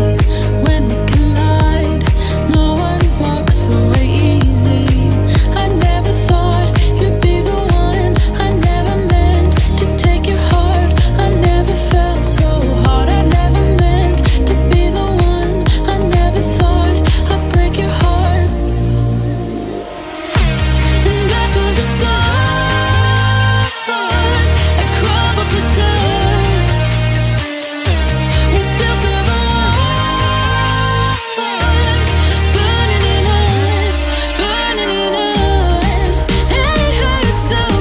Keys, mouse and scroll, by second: 0.0-0.4 typing, 0.8 shift+click, 1.2 middle click, 2.0-2.3 scroll down 1, 2.9 shift+middle click, 3.7-4.3 scroll up 1, 4.3 middle click, 5.3 e, 5.6 shift+click, 6.0-6.4 scroll down 2, 6.2 space, 6.7 space, 6.8 click, 7.0 middle click, 7.9 click, 8.5 shift+click, 8.9 scroll down 1, 9.6 middle click, 10.6 m, 10.7 click, 10.7 click, 11.7 Right, 12.6 typing, 12.9 Return, 13.7 click, 14.1 shift+scroll up 1, 14.4 shift+middle click, 15.3 scroll up 1, 16.3 shift+click, 17.2 scroll up 1, 18.6 m, 19.2 click, 20.7 Left, 22.2-26.1 middle drag, 26.3 scroll up 1, 26.9 k, 29.2 scroll up 1, 31.4-35.6 middle drag, 36.2 scroll down 1, 36.8-37.8 middle drag.